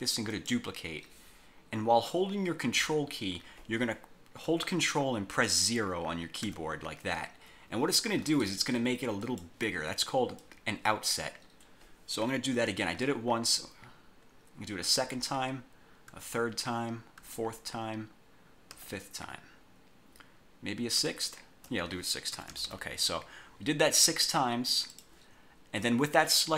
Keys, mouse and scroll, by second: 0.4 click, 6.6 ctrl+0, 9.4 click, 10.6 click, 15.0 ctrl+o, 16.2 ctrl+o, 17.3 ctrl+o, 18.8 ctrl+o, 21.1 ctrl+o, 22.4 -, 23.9 scroll down 2, 25.0 click.